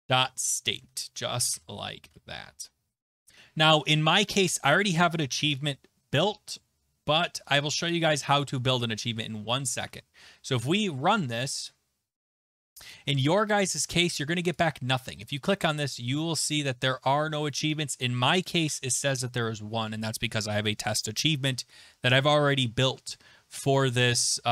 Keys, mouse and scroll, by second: 0.0-2.5 typing, 0.6 Right, 0.9 Right, 5.5 click, 7.9 click, 9.8 alt+Tab, 11.6 click, 14.6 click, 15.3 click.